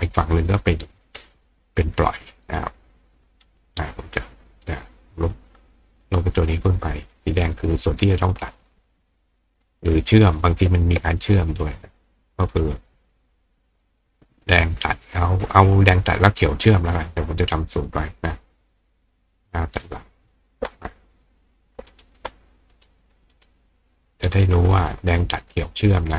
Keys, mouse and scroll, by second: 0.2-1.2 drag, 2.0 click, 2.9 click, 4.3 click, 4.6 right click, 5.5 click, 7.3 click, 8.0-10.2 drag, 19.4 click, 20.3 click, 21.6 click, 21.9 right click, 22.7 right click, 23.3 right click, 24.3 click, 25.6 click.